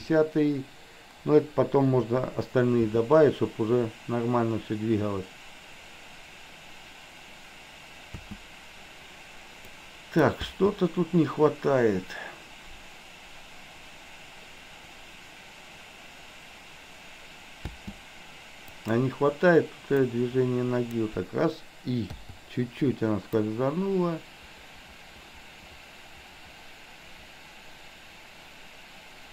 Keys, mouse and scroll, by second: 2.9 space, 8.1 space, 9.8 click, 10.5 space, 17.8 space, 18.8 click, 20.1 click, 22.1 i, 23.5-29.3 drag.